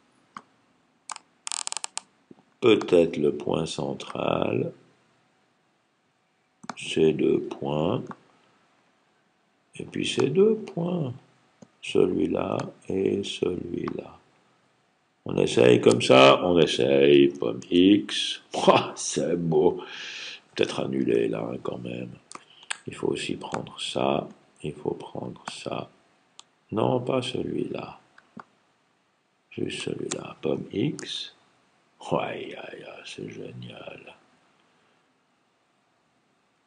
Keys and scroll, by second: 17.4 super+x, 20.4 super+x, 20.9 super+z, 30.9 super+x.